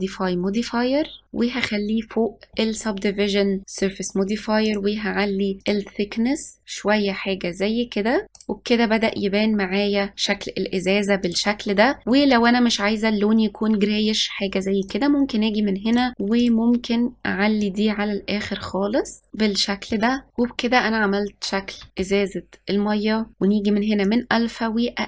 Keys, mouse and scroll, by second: 4.8-6.6 drag, 8.4 click, 9.5 scroll down 1, 11.3 click, 14.9 click, 16.0 click, 16.5 click, 19.3 click, 21.4-21.7 scroll up 1, 21.9-23.3 shift+middle drag, 23.3 scroll down 8, 24.1-25.0 drag.